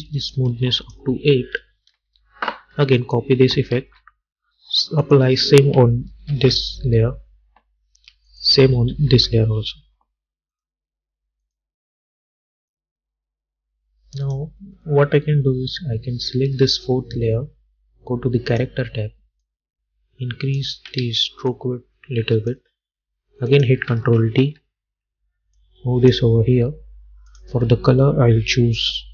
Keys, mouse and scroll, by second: 2.1 Return, 3.1 click, 3.9 ctrl+c, 5.1 click, 6.4 ctrl+v, 8.4 click, 9.0 ctrl+v, 10.6 click, 18.6-21.1 drag, 21.1 ctrl+z, 21.6-23.6 drag, 24.5 ctrl+d, 25.7-29.1 drag.